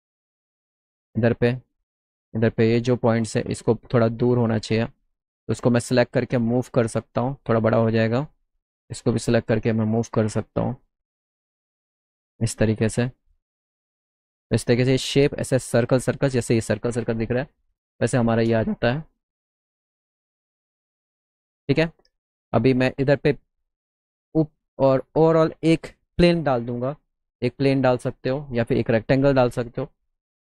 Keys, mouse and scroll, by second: 0.1 click, 1.1 middle click, 2.8 click, 3.8 click, 4.7 click, 5.3 click, 6.5-7.6 drag, 8.1 click, 9.8 click, 10.1 middle click, 11.0 middle click, 12.8 click, 13.6 middle click, 13.6 scroll up 1, 14.0 middle click, 14.2 middle click, 14.7 middle click, 17.4 click, 17.9 click, 18.3 click, 18.7 middle click, 19.0 middle click, 20.0 click, 21.1 F3, 24.0 click, 24.4 click, 25.4 click, 27.2 middle click, 27.2 scroll up 1, 27.6 middle click, 27.6 scroll down 1, 29.4 middle click.